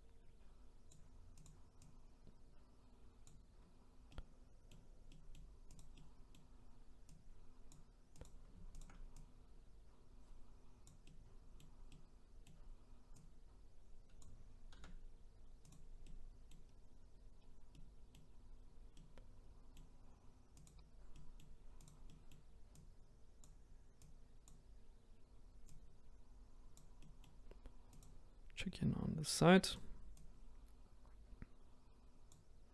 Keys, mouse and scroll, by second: 1.4 click, 1.9 click, 4.1-5.8 middle drag, 5.8 click, 5.9-7.2 middle drag, 7.2 click, 8.3 click, 8.8 shift+click, 11.1-13.2 middle drag, 13.2 click, 14.8 s, 16.1 middle click, 16.7-17.4 scroll up 1, 17.4 scroll down 1, 17.7 middle click, 18.6-19.0 scroll down 1, 19.0-20.6 middle drag, 20.6 click, 21.1 middle click, 21.8 click, 22.1 middle click, 22.8 click, 24.1 click, 25.8 click, 27.0-28.0 middle drag, 28.0 click, 28.3-28.6 scroll up 2, 29.8 click, 30.2 click.